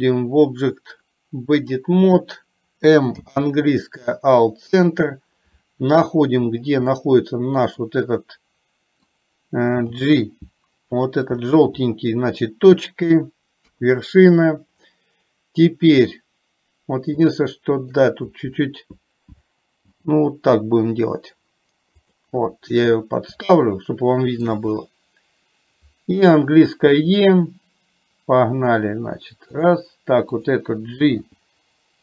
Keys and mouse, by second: 0.0-2.0 drag, 3.2 m, 7.0-9.1 middle drag, 13.7 KP_3, 17.5 shift+middle click, 23.6-24.6 shift+middle drag.